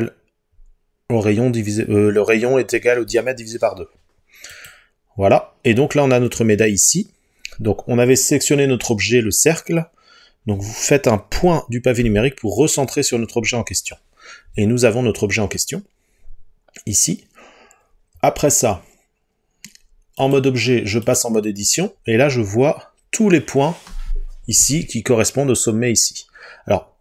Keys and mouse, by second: 12.1 KP_Decimal, 20.4 click.